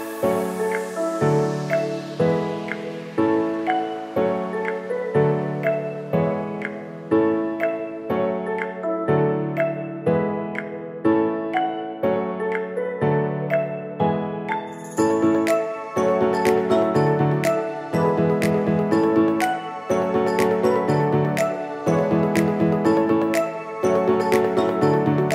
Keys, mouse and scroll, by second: 0.0-2.1 typing, 3.3-11.9 drag, 11.9 ctrl+z, 13.4 t, 14.0 click, 15.1-16.9 typing, 18.1 click, 20.2 t, 20.9 click, 22.8-25.3 typing.